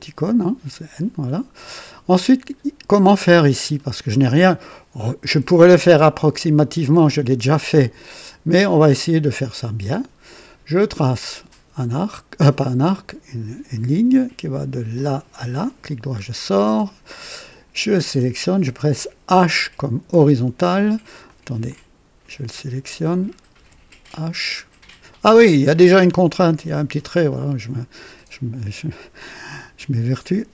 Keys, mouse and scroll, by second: 0.1 n, 1.4 click, 3.7 scroll up 1, 4.0 right click, 6.8 right click, 7.8-9.0 drag, 11.0 click, 12.8 click, 14.9 click, 15.6 right click, 16.1-16.4 scroll up 1, 16.5 right click, 16.9 typing, 17.9 click, 19.9 typing, 21.2 click, 21.6 click, 23.0 click, 23.5 typing, 25.2 click.